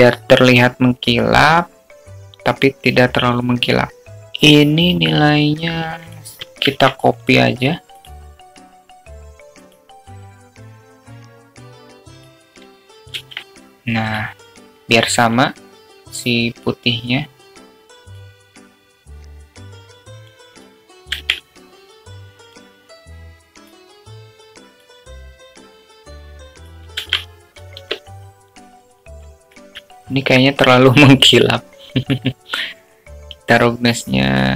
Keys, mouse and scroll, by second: 4.0 click, 8.1-10.2 drag, 11.7 click, 14.3-16.3 drag, 20.1 click, 22.2-24.6 drag, 25.6 click, 26.7 click, 28.6-30.1 drag, 30.1 alt+middle drag, 31.6-33.2 alt+middle drag.